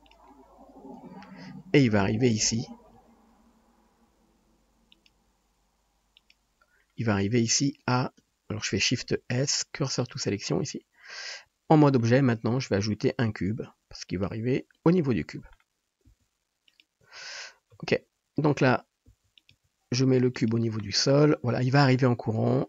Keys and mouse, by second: 2.9 KP_7, 3.9 r, 5.2 g, 7.0 Tab, 8.2 Tab, 9.0 shift+s, 11.0 Tab, 13.1 shift+a, 14.7-15.5 drag, 16.1 s, 17.7 KP_3, 19.0 s, 19.6 g, 19.8-22.6 drag.